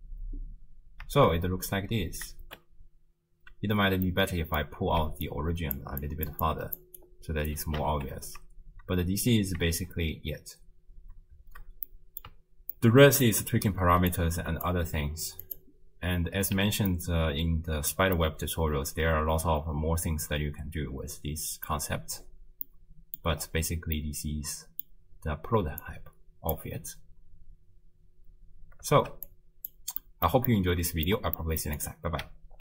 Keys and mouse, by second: 1.2 shift+space, 2.5 shift+space, 3.7 space, 4.2-4.7 middle drag, 5.0-7.9 typing, 5.2 click, 6.0 click, 6.5 click, 7.0 click, 9.7 shift+space, 11.0 space, 11.9 click, 12.8 ctrl+click, 14.1-14.7 drag, 15.0 g, 17.1 ctrl+middle click, 18.2-21.7 middle drag, 22.7 middle click, 24.0 middle click, 25.8 click, 26.9 space, 28.5 space, 29.0 shift+space, 29.3 click, 30.0 middle click, 30.6 ctrl+click, 30.7 ctrl+middle click, 31.4 middle click, 31.8 click.